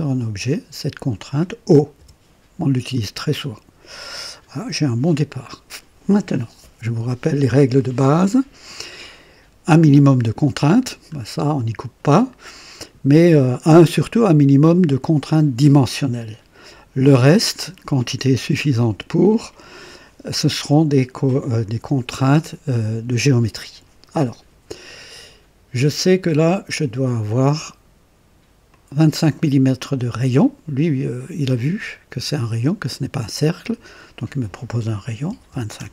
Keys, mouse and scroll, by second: 2.0 o, 10.8 scroll down 2, 26.4 click, 28.7 click, 35.3 KP_2, 35.5 KP_5, 35.8 KP_Enter.